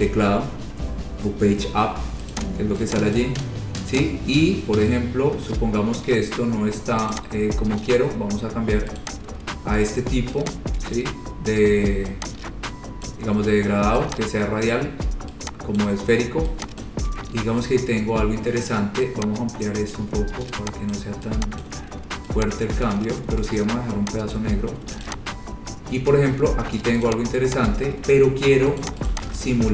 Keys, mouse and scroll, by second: 2.5 click, 3.4 click, 4.2 click, 4.4-4.8 scroll, 5.2 scroll, 7.3 click, 9.2 click, 11.1 click, 13.2 click, 14.9 click, 16.0 click, 17.0 click, 17.6-18.2 scroll, 20.2 click, 21.1 click, 21.8 click, 23.1 click, 24.6 click, 25.3 click, 25.6-27.0 scroll, 27.3 click, 27.9 click, 28.5 scroll down 6, 29.1 click, 29.3 click, 29.6 ctrl+z.